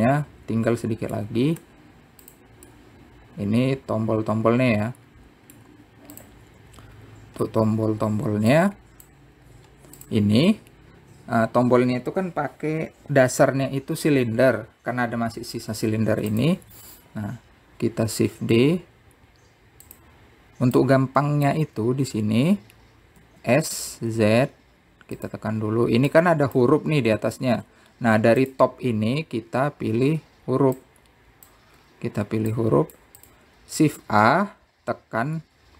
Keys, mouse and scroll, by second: 1.5-1.9 scroll down 1, 1.9 middle click, 4.0-6.9 middle drag, 8.0 scroll up 2, 9.7 click, 10.6 scroll up 2, 11.2 click, 11.8-12.2 scroll down 2, 16.2 scroll down 2, 17.5 click, 19.5 shift+d, 22.0-23.0 drag, 23.0 scroll up 3, 24.4 s, 27.3 click, 30.1-32.0 scroll down 5, 32.0 click, 33.0-33.5 scroll up 5, 33.7 click, 34.4 click, 35.0 shift+a.